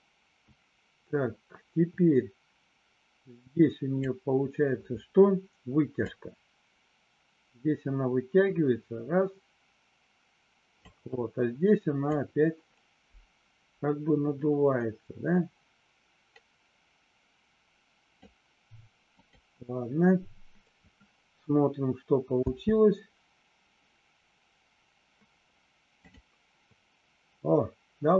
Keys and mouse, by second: 6.2-10.9 drag, 12.3-18.3 drag, 19.2 click, 22.4 space, 26.0 click.